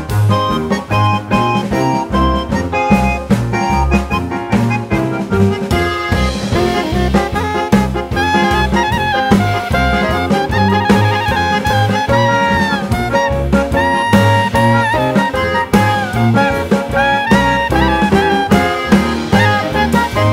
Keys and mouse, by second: 0.8-2.6 drag, 3.7-5.7 drag, 6.9 click, 8.0-10.0 drag, 11.0-12.9 drag, 14.6-16.5 drag, 17.3 click, 19.5 g.